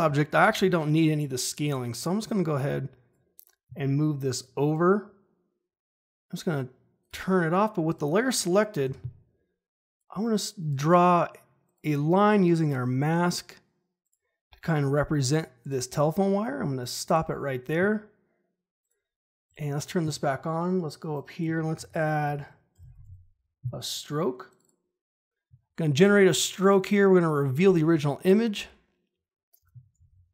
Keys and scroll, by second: 8.8 g, 21.5-23.5 typing, 29.9 ctrl+shift+h.